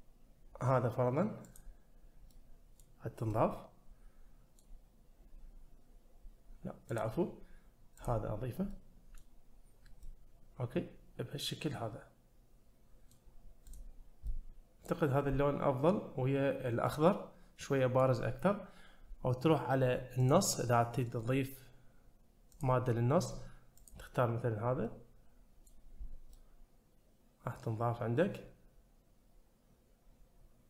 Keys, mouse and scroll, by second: 2.9 middle click, 3.3-4.6 middle drag, 6.9-8.2 drag, 8.7-9.2 middle drag, 10.0-13.2 middle drag, 13.7 click, 14.0 scroll down 1, 14.3-14.8 middle drag, 16.5-16.9 scroll up 1, 16.9-18.0 middle drag, 20.2 click, 22.5-24.0 drag, 24.8-25.7 middle drag, 26.0 scroll up 1, 26.3-30.6 middle drag.